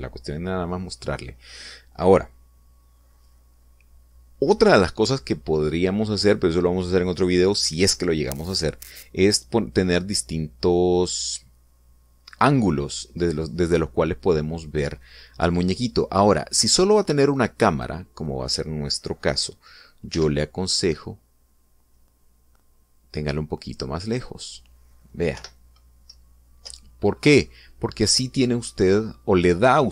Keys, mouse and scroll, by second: 18.5 right click, 20.9 g, 21.5 middle click, 24.9 click, 26.1 p, 26.9 Left, 27.5 Up.